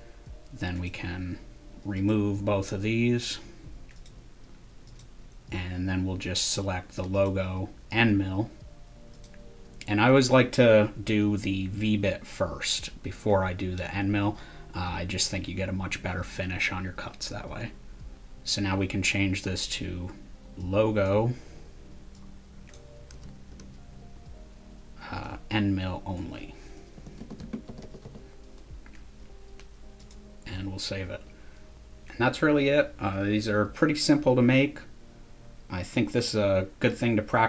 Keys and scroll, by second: 23.1 BackSpace, 23.5 BackSpace, 26.7-28.5 typing.